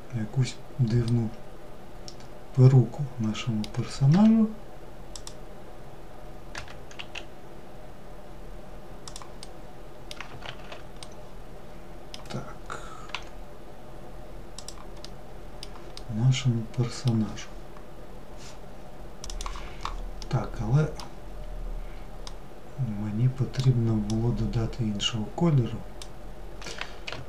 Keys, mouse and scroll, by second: 0.3-3.3 middle drag, 3.3 1, 4.3 click, 8.6-9.7 middle drag, 9.7 ctrl+z, 10.2-12.3 middle drag, 12.3 g, 14.2-18.2 middle drag, 19.4-23.2 middle drag, 23.2 click.